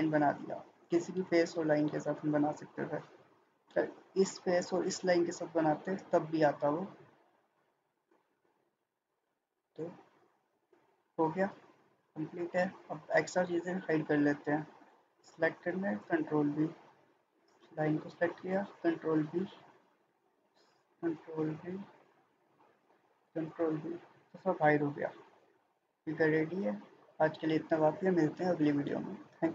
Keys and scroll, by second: 15.9 ctrl+b, 18.7 ctrl+b, 23.4 ctrl+b.